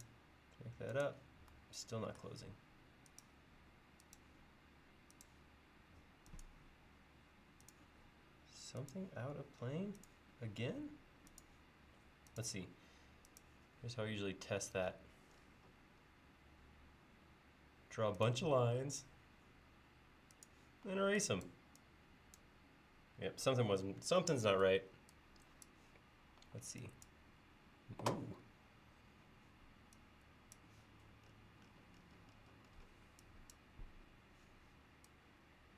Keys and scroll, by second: 20.9 e, 26.4 e.